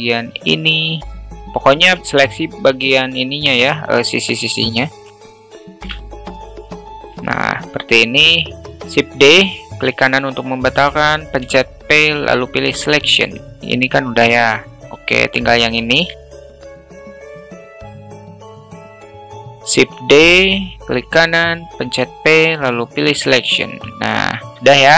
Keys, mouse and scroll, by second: 0.6 middle click, 1.6 alt+middle click, 2.2 middle click, 3.0 shift+click, 4.7 alt+middle click, 5.5 alt+middle click, 6.8 alt+middle click, 8.0 alt+middle click, 8.6 shift+d, 11.0 p, 13.4 Tab, 13.8 ctrl+z, 15.2 Tab, 15.7 alt+middle click, 16.7 alt+shift+middle click, 17.5 shift+click, 19.5 shift+d, 21.2 p, 23.3 Tab.